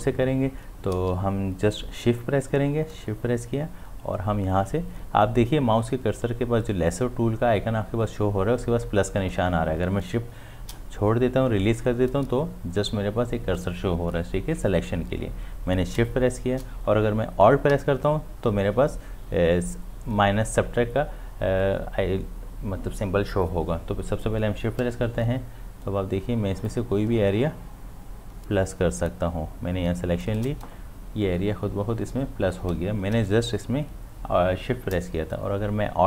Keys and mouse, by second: 3.0 shift+Num_Lock, 16.0 shift+Num_Lock, 24.8 shift+Num_Lock, 26.7-33.1 shift+drag.